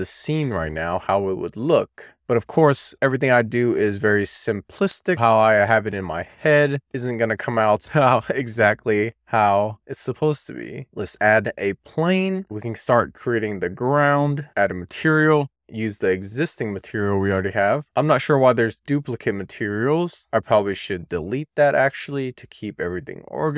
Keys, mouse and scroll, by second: 4.2 middle click, 4.6-5.3 scroll up 1, 5.3-6.0 scroll up 1, 6.0-6.5 scroll down 1, 6.6 shift+middle click, 7.6 middle click, 8.0 drag, 8.5 middle click, 10.0 click, 11.2 shift+a, 12.8 middle click, 13.1 e, 13.7 middle click, 13.8 click, 14.4 w, 14.5 click, 17.8-23.2 drag.